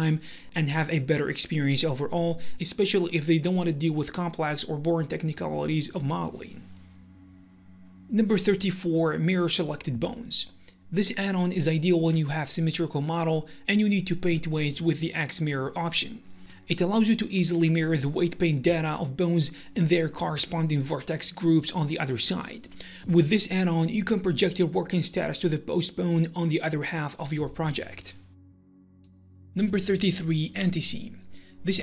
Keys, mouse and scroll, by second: 0.0 right click, 0.3-1.1 scroll down 1, 1.7 click, 1.8 middle click, 2.5 right click, 2.6-7.7 middle drag, 2.9 g, 6.9-7.7 scroll down 1.